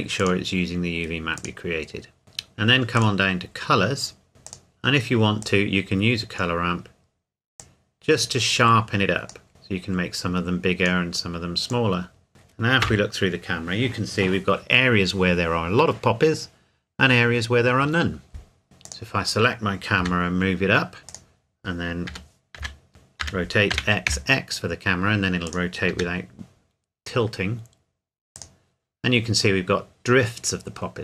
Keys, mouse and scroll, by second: 0.2 click, 2.2-3.0 scroll down 1, 3.0 click, 3.4-4.0 scroll down 1, 4.5 click, 5.9-7.6 scroll down 1, 7.6 click, 12.8 KP_0, 18.8 click, 20.0 g, 21.1 click, 22.1 r, 22.6 x, 22.9 Escape, 23.2 r, 23.7 x, 25.5 click, 25.9 g, 28.4 click.